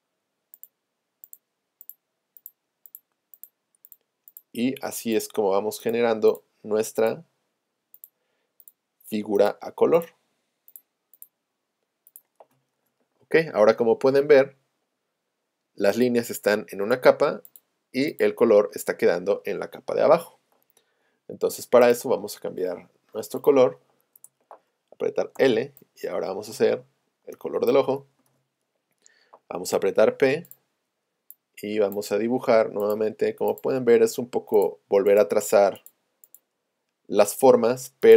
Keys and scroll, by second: 24.2 Return, 25.4 |, 29.8 p.